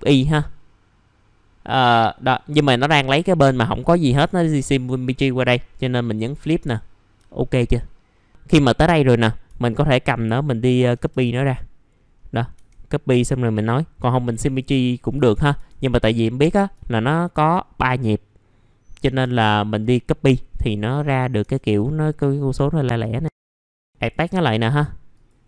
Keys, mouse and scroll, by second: 6.0 click, 7.2 alt+middle click, 9.6 shift+click, 11.5-12.0 scroll up 1, 12.5-13.1 scroll up 1, 13.1-15.3 drag, 15.3 scroll down 1, 16.1 middle click, 16.3-16.7 scroll down 1, 17.3 shift+click, 20.0 scroll up 1, 21.4-22.3 scroll up 1, 22.3 click, 23.3 scroll down 1, 23.5 right click, 23.8 click, 24.3 middle click, 24.4-25.1 scroll down 1, 25.1 click.